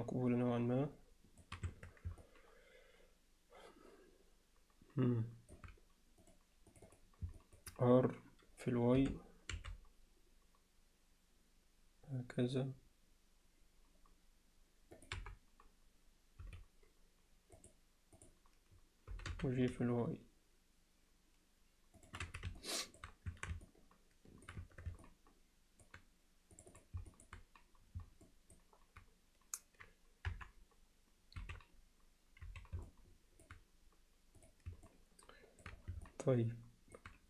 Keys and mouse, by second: 2.2-5.6 alt+middle drag, 6.7 click, 7.4 middle click, 15.2 KP_7, 16.4 z, 17.6-18.4 drag, 19.1 g, 22.6 middle click, 23.3 Tab, 23.7 alt+middle click, 24.6 Tab, 25.0 alt+middle click, 26.5 click, 26.7 click, 27.1 alt+middle click, 28.3 middle click, 30.3 KP_1, 31.4 z, 32.5 z, 32.9 alt+middle click, 34.4 click, 34.9 middle click, 36.1 alt+middle click.